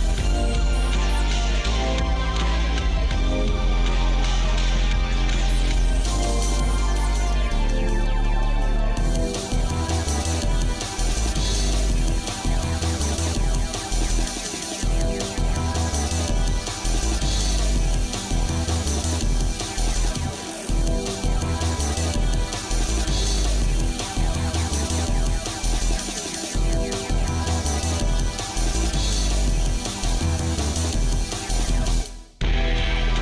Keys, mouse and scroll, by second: 1.8 middle click, 2.2-5.4 shift+middle drag, 5.8 scroll down 1, 6.0-8.2 shift+middle drag, 8.6 shift+middle click, 9.2 scroll up 1, 9.9 shift+click, 11.5 shift+click, 12.0 shift+click, 12.5 shift+click, 13.3 space, 16.8 shift+middle click, 17.5 shift+middle click, 18.6-19.8 shift+middle drag, 21.0 shift+middle click, 21.8 scroll down 1, 22.4 shift+middle click, 23.2 middle click, 23.7 shift+middle click, 24.2 middle click, 24.7 shift+middle click, 25.5 middle click, 26.7 shift+middle click, 29.0 click, 31.3 shift+middle click, 31.9 middle click.